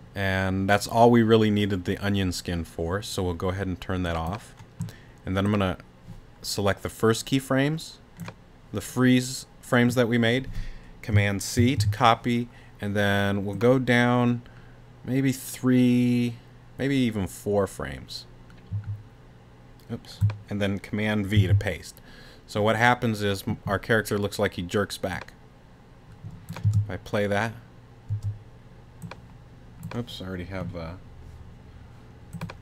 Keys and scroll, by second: 11.6 super+c, 21.3 super+v, 26.6 space, 28.1 space.